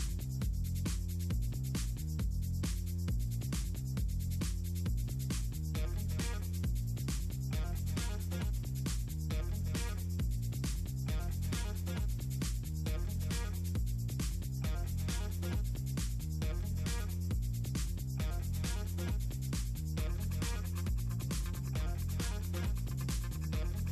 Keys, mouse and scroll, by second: 1.6 middle click, 2.2 ctrl+scroll down 2, 3.7-4.4 ctrl+scroll down 2, 5.5 middle click, 7.4 click, 11.5 scroll up 2, 11.7-12.2 scroll down 4, 13.9 click, 14.5 click, 17.1 click, 20.5-21.5 middle drag, 22.7 click.